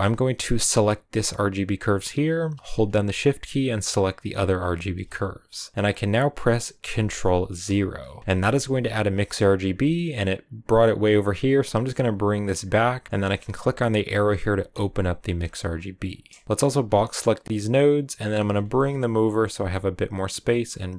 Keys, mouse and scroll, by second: 7.5 ctrl+0, 9.3-14.5 middle drag, 14.5-20.9 drag.